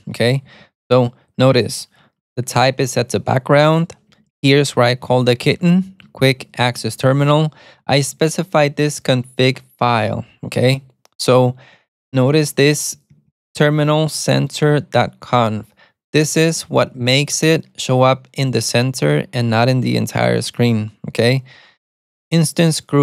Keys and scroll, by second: 0.6-8.7 typing, 12.4-14.3 typing, 17.0 alt+super+a, 17.1 typing, 18.6 typing, 21.7 typing.